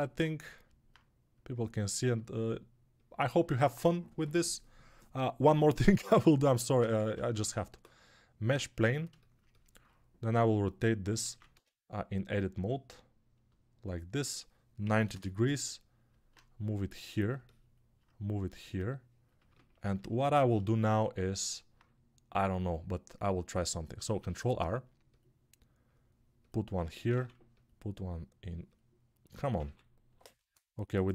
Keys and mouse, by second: 6.8 ctrl+Tab, 7.2 shift+a, 11.2 ctrl+z, 11.4 Tab, 20.3 alt+shift+middle click, 23.6-31.1 ctrl+right drag, 24.0 ctrl+r, 27.1 ctrl+r, 29.6 ctrl+r.